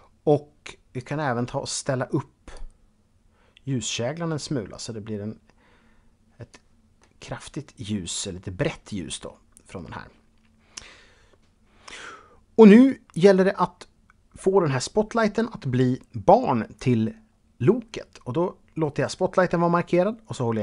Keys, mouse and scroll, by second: 0.8 click, 2.4 click, 6.8 middle click, 8.6-9.1 scroll down 1, 9.1-10.6 scroll up 3.